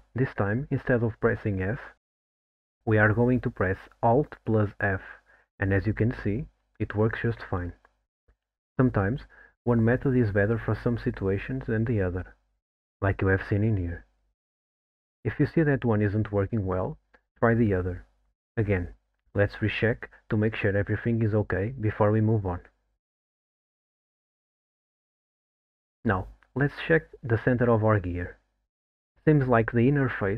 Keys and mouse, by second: 5.3 alt+f, 12.8 click, 14.3 middle click, 16.2 middle click, 18.0 middle click, 19.4 middle click, 24.3 click, 28.6 alt+middle click.